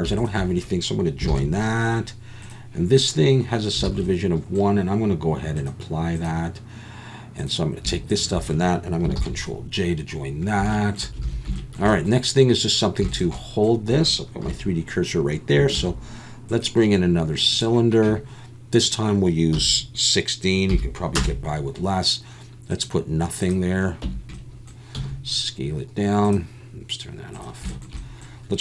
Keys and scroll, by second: 1.3 ctrl+j, 3.9 alt+a, 9.1 ctrl+j, 11.2 alt+a, 14.4 KP_7, 15.8 shift+a, 24.0 Tab, 24.9 s.